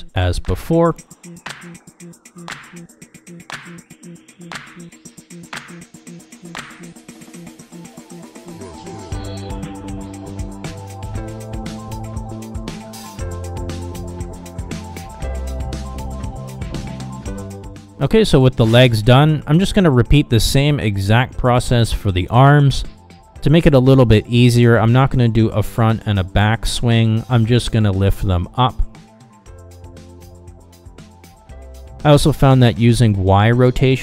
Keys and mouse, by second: 14.8-16.1 middle drag, 16.8 shift+middle drag, 16.9 middle click, 17.3 middle click, 17.6 shift+middle drag, 21.0 KP_1, 21.8 KP_3, 22.3 r, 24.6 KP_1, 25.3 g, 26.9-27.4 middle drag, 27.7 KP_7, 28.1 r, 29.7-30.0 middle drag, 30.1 middle drag, 30.6 KP_1, 31.3 g.